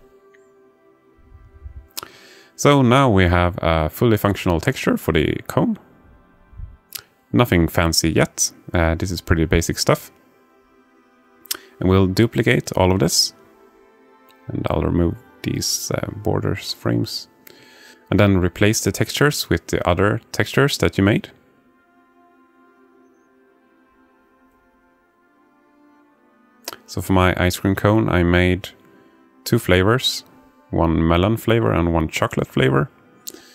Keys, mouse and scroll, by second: 1.1-2.1 drag, 4.2-6.3 drag, 7.6-8.6 alt+middle drag, 10.2-10.7 alt+shift+middle drag, 11.2-12.0 alt+middle drag, 12.7 alt+shift+middle click, 14.1-15.1 drag, 16.2 shift+d, 19.2 alt+shift+click, 20.4 click, 21.1 Delete, 22.0 click, 22.3 Delete, 25.2 click, 31.9 click.